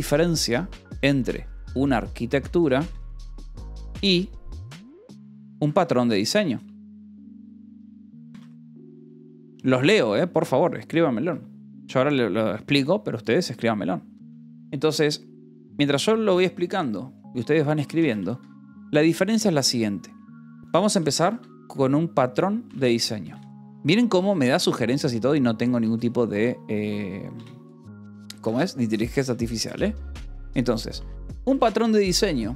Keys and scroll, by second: 1.1-4.0 typing, 5.5-9.5 typing, 10.6 o, 11.1 Escape, 15.6 0, 16.7 i, 18.0 space, 18.2 Escape, 19.3 o, 19.5 Return, 20.1 BackSpace, 21.2 a, 21.5 r, 22.6 BackSpace, 23.4 :, 23.6 space, 24.1 Return, 24.5 space, 26.4-29.6 typing, 30.3 Escape, 30.9 a, 31.7 space.